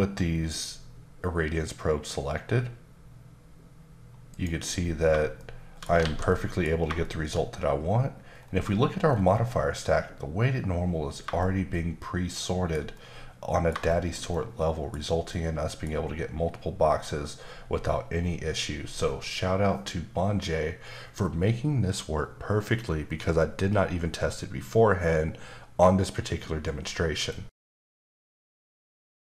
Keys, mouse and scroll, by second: 2.3-3.4 scroll up 1, 4.3 click, 5.4 shift+middle click, 6.0 alt+a, 6.3 middle click, 6.7 scroll down 1, 7.0 shift+middle click, 8.4-11.2 scroll down 8, 11.4 shift+middle click, 13.9 shift+middle click, 15.3 middle click.